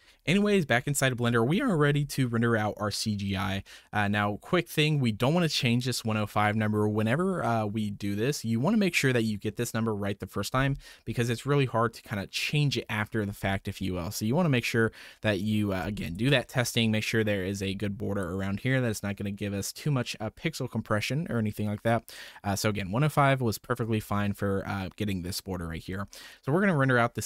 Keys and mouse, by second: 1.5 click, 3.4 typing, 4.1-4.7 drag, 16.0 ctrl+shift+click, 26.0 middle click.